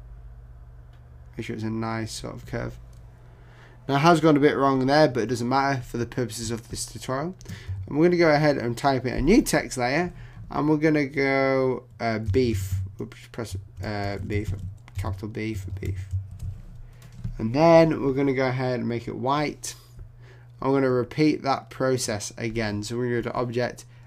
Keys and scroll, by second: 14.2 shift+BackSpace, 15.0 shift+b, 16.3 super+Return.